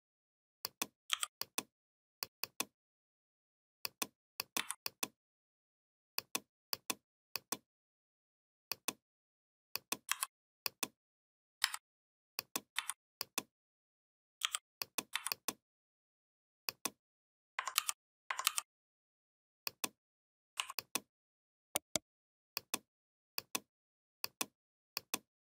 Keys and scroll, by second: 0.9 i, 4.3 v, 9.9 m, 11.4 a, 12.5 v, 14.2 i, 14.9 v, 17.5 ctrl+g, 18.2 ctrl+g.